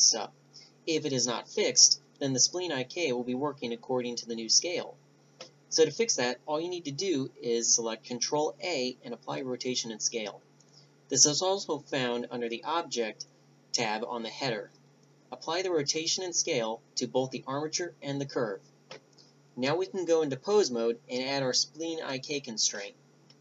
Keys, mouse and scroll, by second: 5.1 ctrl+a, 14.1 click.